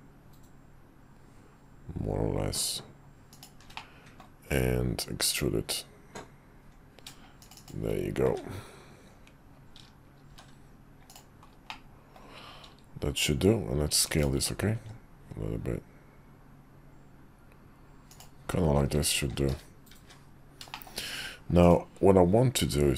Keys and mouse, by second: 3.8-4.2 middle drag, 10.3 shift+3, 11.7-12.1 middle drag, 14.7 s, 19.2 shift+2, 20.0 `, 20.7 shift+middle click, 21.6-22.2 drag.